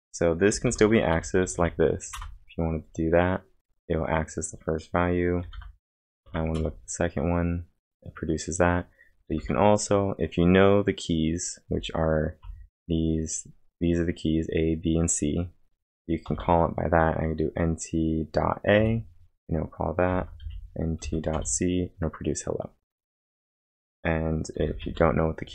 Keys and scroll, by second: 0.3-2.1 typing, 2.1 Return, 5.6-6.8 typing, 9.3 Return, 9.3 typing, 16.3 Return, 16.3 typing, 18.5-21.5 typing.